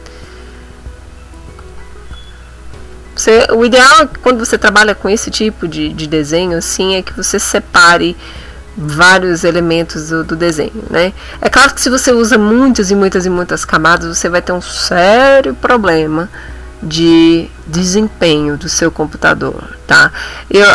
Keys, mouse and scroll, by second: 1.6 click, 2.1 click.